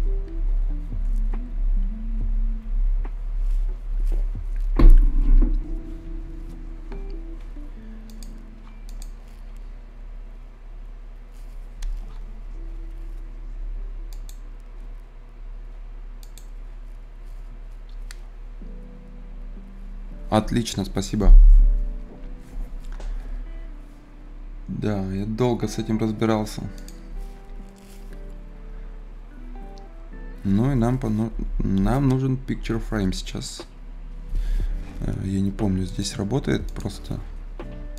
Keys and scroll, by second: 36.9 Page_Down.